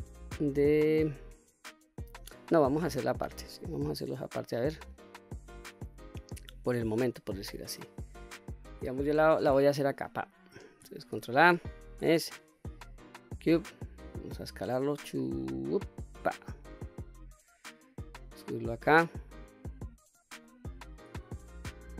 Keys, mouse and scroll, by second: 1.7-2.5 scroll down 2, 2.5 Tab, 3.1 scroll down 2, 3.5-4.5 middle drag, 4.9 scroll up 2, 5.3-5.8 middle drag, 6.5-7.1 middle drag, 9.8-10.2 shift+right drag, 10.8 shift+a, 14.5 s, 15.9 click, 16.4-17.5 middle drag, 18.1-19.9 drag, 20.1-21.1 middle drag.